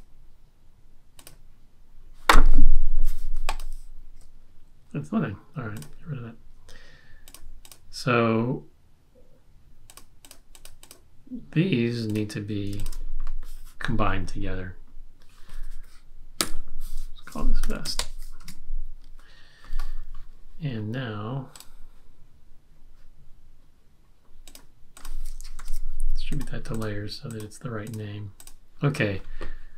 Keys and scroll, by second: 16.4 F8, 17.4-18.4 typing, 20.0 typing, 25.5 shift+super+d.